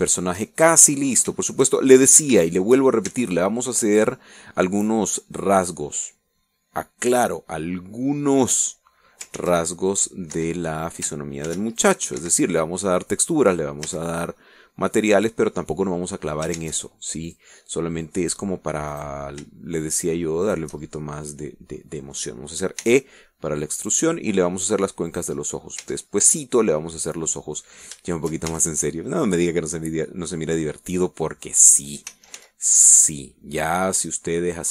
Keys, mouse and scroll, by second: 1.2-2.2 shift+middle drag, 2.6 shift+middle click, 3.3-4.4 shift+middle drag, 4.3 shift+Tab, 5.1-7.1 middle drag, 10.6 ctrl+r, 11.2 ctrl+click, 11.6 Escape, 12.7 ctrl+r, 13.1 ctrl+click, 13.5 ctrl+Escape, 14.1 click, 15.1 a, 15.6 click, 16.4 middle click, 17.8 ctrl+Tab, 18.6 click, 20.3 right click, 21.7 shift+right click, 22.2-23.6 shift+middle drag, 24.1 e, 26.4 click, 27.1 Tab, 27.4 scroll down 1, 27.6-28.7 drag, 29.4 shift+middle click, 29.8 shift+Tab, 30.4 middle click, 33.4 s, 33.6 x.